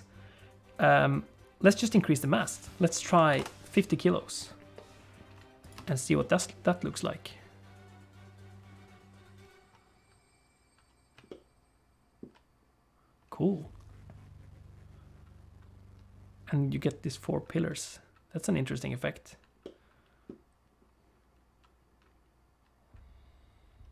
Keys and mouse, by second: 2.2-3.9 drag, 5.7 space, 6.4 middle click, 11.4-12.5 shift+middle drag, 19.8 middle click.